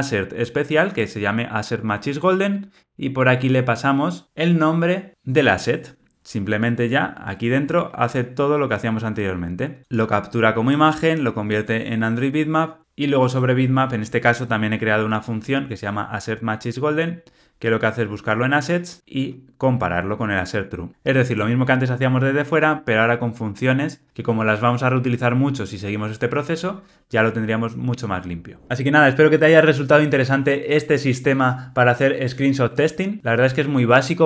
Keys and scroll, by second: 6.9 super+b, 21.3 alt+super+[.